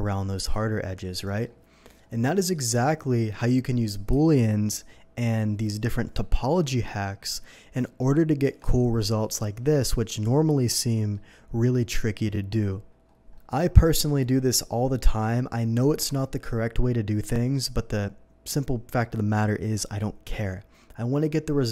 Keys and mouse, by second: 4.1 n, 8.4 Tab, 13.5 click, 13.8-21.7 drag.